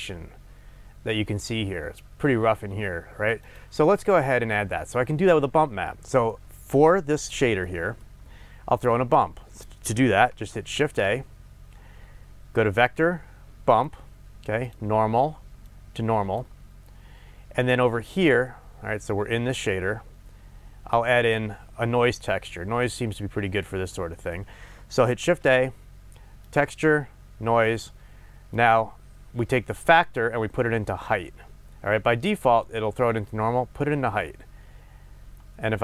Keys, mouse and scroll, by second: 0.0-9.5 middle drag, 8.2-9.0 scroll up 2, 10.8 shift+a, 14.7 click, 15.7-18.4 drag, 18.4-28.6 middle drag, 21.4-24.1 scroll up 2, 25.2 shift+a, 28.6 click, 30.1-35.8 drag.